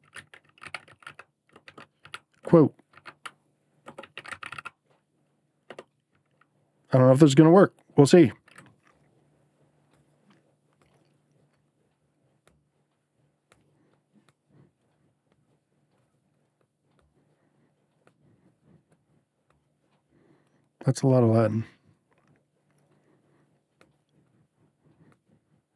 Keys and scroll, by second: 0.0-4.9 typing, 5.6 Return.